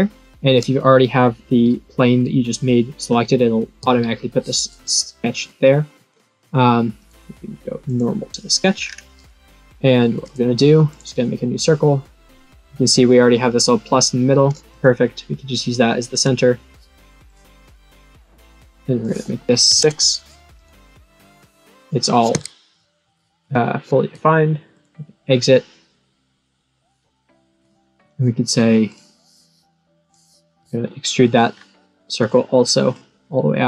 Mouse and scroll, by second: 7.0 right click, 7.8 click, 8.7 scroll down 4, 10.8 click, 14.6 click, 16.0 click, 18.0 click, 19.0 click, 20.5 right click, 21.3 click, 24.7 click, 28.8 click, 30.0 click, 31.5-32.1 scroll down 4.